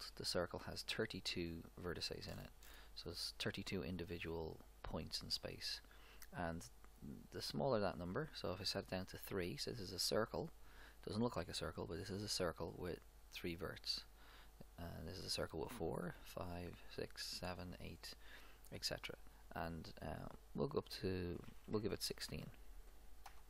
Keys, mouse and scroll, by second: 1.6 click, 7.4-9.1 drag, 15.0-21.2 drag.